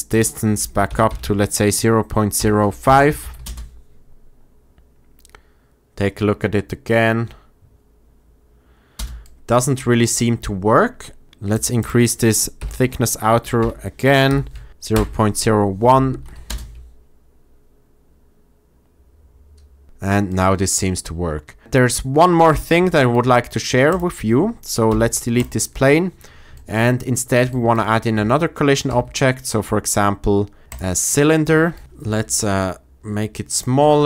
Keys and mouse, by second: 0.8 BackSpace, 3.1 shift+Left, 3.3 space, 8.9 space, 11.5-14.9 drag, 16.0 shift+Left, 16.4 space, 19.8 space, 20.2-20.5 drag, 24.8 x, 28.8 shift+a, 31.8 Tab, 31.8 s, 31.9 shift+z, 33.4 click, 33.7 Tab.